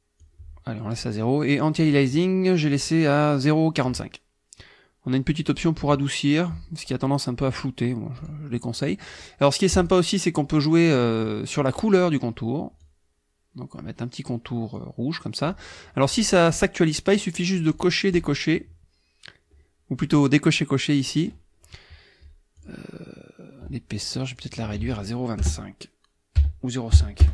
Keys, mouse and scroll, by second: 0.2 click, 2.6 click, 5.4 click, 8.2 click, 9.7 click, 12.8 click, 14.7 click, 17.7 click, 18.1 click, 22.6 click, 24.4 click, 24.8 ctrl+a, 25.4 KP_0, 26.4 ,, 26.9 KP_5, 27.2 Return.